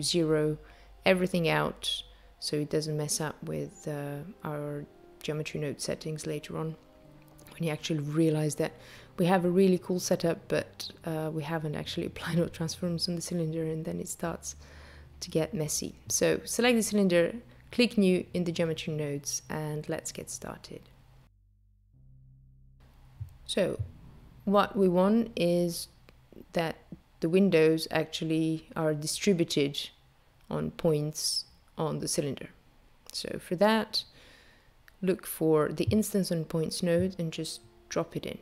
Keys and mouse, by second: 1.5 click, 4.6 click, 7.9 click, 12.0 n, 15.8 click, 22.1 click, 30.2 click, 31.1 shift+a.